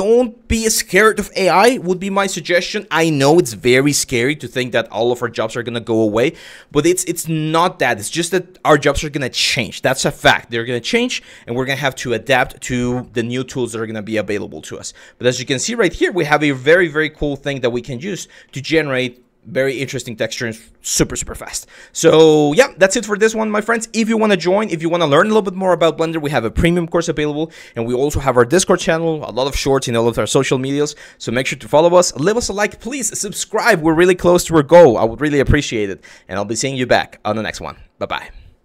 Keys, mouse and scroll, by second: 15.1-15.5 shift+drag, 16.3 drag, 16.9 shift+drag, 17.6 click, 18.1-18.6 drag, 23.5 click, 24.4 shift+click.